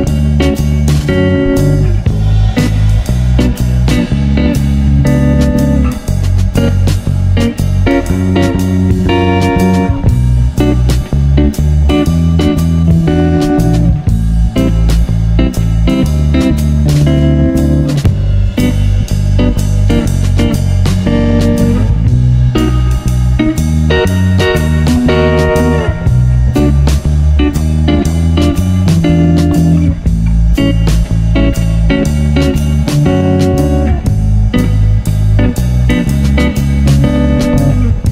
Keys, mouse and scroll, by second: 0.1-0.5 scroll up 7, 0.5-1.1 shift+middle drag, 1.1 click, 1.3 shift+a, 4.6 click, 5.3-5.7 scroll down 7, 5.7 shift+middle click, 6.4 click, 7.1 drag, 8.6-9.5 shift+middle drag, 9.5 click, 11.7-12.0 scroll up 7, 12.1 shift+middle click, 12.5 scroll up 4, 13.4-15.3 shift+middle drag, 15.3 scroll up 1, 15.6-17.6 shift+middle drag, 17.6-19.7 drag, 21.6 0, 23.1-25.2 drag, 25.4-27.7 drag, 27.9 0, 30.5-32.6 drag, 33.6 0, 35.6-37.6 drag.